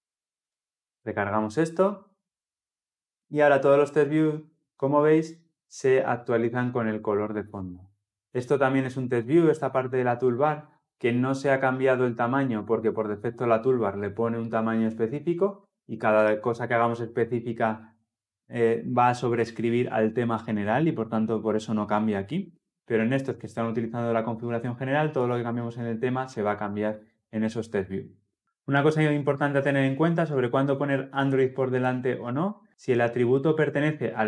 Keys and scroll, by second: 0.3 Return, 0.3 ctrl+F10.